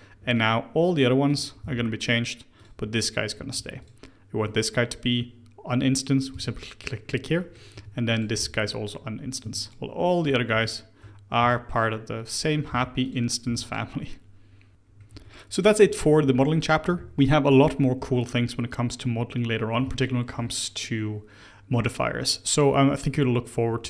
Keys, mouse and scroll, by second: 0.3 click, 0.7 Tab, 1.2 click, 1.5 g, 3.5 Tab, 3.7 click, 6.2 click, 6.9-7.3 scroll down 1, 7.3-7.7 middle drag, 7.7 Tab, 8.0 click, 8.3 g, 9.4 Tab, 9.5 click, 10.4 Tab, 11.3 a, 12.2 click, 12.6 g, 13.0 click, 13.4 3, 13.6 click, 14.7 Tab, 14.7 scroll down 1, 15.0 Tab, 17.9 Tab.